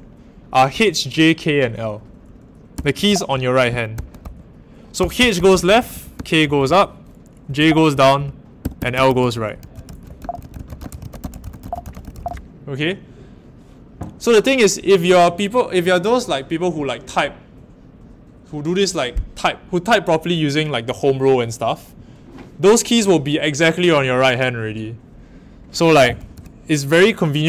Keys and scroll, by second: 0.7 h, 2.7-12.2 typing, 25.7-26.8 typing.